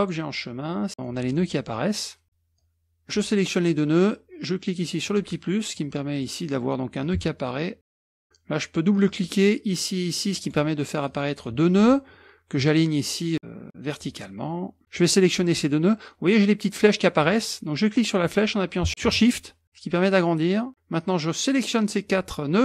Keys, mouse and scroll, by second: 0.7 click, 1.9 middle click, 2.6-3.6 drag, 5.1 click, 6.2 click, 7.0-8.2 drag, 9.0 click, 10.3 click, 11.1 click, 13.9 click, 14.8 ctrl+z, 15.0 click, 17.3-20.7 drag, 21.0-22.3 drag.